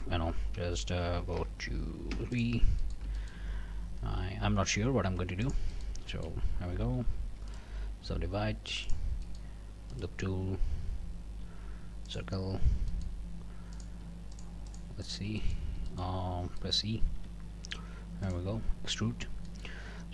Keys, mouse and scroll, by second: 2.1 3, 2.3 click, 2.8 shift+click, 3.2 shift+click, 4.1 i, 5.4 click, 6.1 shift+click, 6.4 shift+scroll up 1, 7.5 right click, 8.8 click, 9.2 click, 9.9 right click, 12.1 click, 12.9 click, 13.7 click, 14.3 shift+click, 14.7 shift+click, 15.0 shift+click, 15.4 shift+click, 15.9 shift+click, 16.2 shift+scroll down 1, 16.6 middle click, 17.1 e, 18.2 middle click, 18.5 scroll down 1, 18.9 Tab, 19.2 scroll up 1, 19.5 middle click, 19.9 scroll up 2.